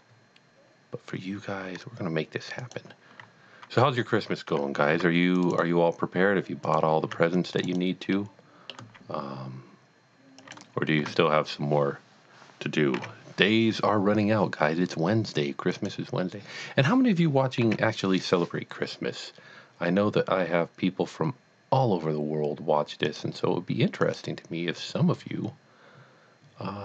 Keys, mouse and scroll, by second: 2.6 click, 4.2 alt+a, 5.1 c, 5.4 click, 5.4 right click, 6.6 click, 7.2 c, 7.4 click, 7.6 right click, 8.2 middle click, 8.9 x, 10.4 click, 11.0 Tab, 13.0 z, 15.7 z, 15.8 click, 17.6 z, 23.1 click, 24.0 click.